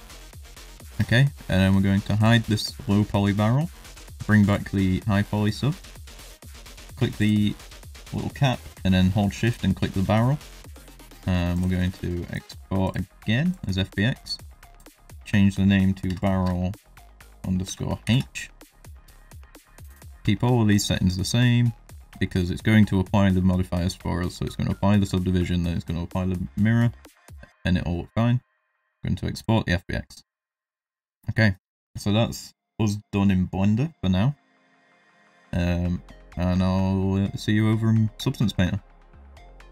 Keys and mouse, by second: 0.1 middle drag, 2.1 click, 3.9 click, 4.4 click, 5.3 middle drag, 6.0 click, 7.6 middle click, 9.8 middle drag, 11.5-13.6 drag, 30.0 middle drag, 30.5 shift+middle drag, 31.5 middle drag.